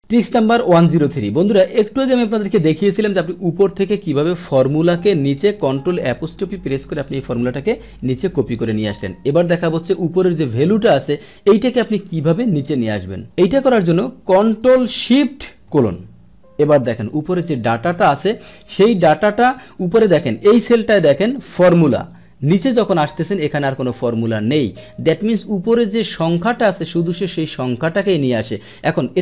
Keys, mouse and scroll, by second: 1.6-2.8 drag, 4.7 click, 5.2 Delete, 5.7 Delete, 7.7 click, 17.6 Return, 18.7 Up, 20.1 Up, 26.1 click, 27.2 click.